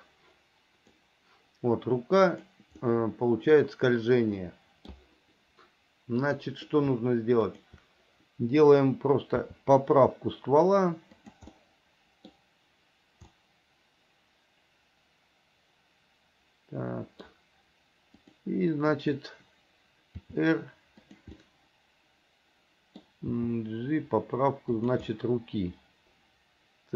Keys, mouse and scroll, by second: 0.0-1.2 drag, 2.4 click, 3.1-5.1 middle drag, 6.3 click, 7.7 shift+click, 9.6 r, 11.8 middle click, 13.6-17.4 middle drag, 18.3 click, 19.1 click, 20.3 r, 21.6-23.2 middle drag, 23.5 g, 25.3-26.9 middle drag.